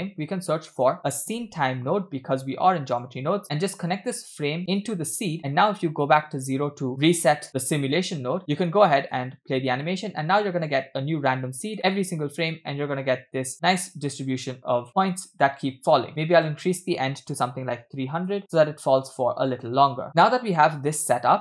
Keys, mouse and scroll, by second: 0.0 shift+a, 3.9-5.1 drag, 6.4 click, 7.5 middle click, 8.4 middle click, 8.4-8.7 scroll down 3, 9.1 space, 9.8-10.7 middle drag, 11.8-12.5 shift+middle drag, 16.1 space, 16.4-18.3 drag, 18.0 0, 18.9 scroll down 2, 19.2 space.